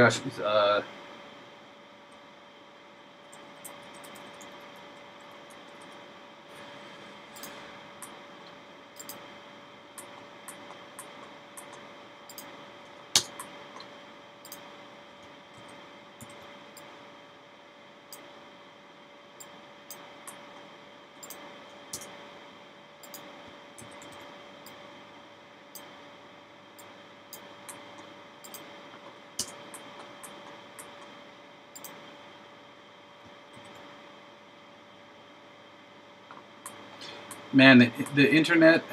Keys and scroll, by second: 15.6 super+c, 16.2 super+v, 23.9 super+c, 24.1 super+v, 33.6 super+c.